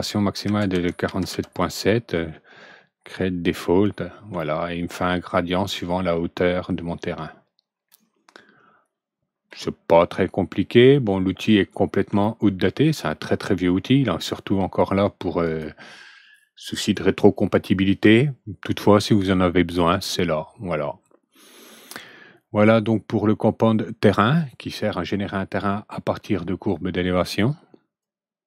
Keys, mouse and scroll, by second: 0.4 KP_4, 0.6 KP_7, 1.2 KP_7, 3.4 click, 4.3-9.4 alt+middle drag, 12.1 alt+middle click, 15.4 click, 27.9 click.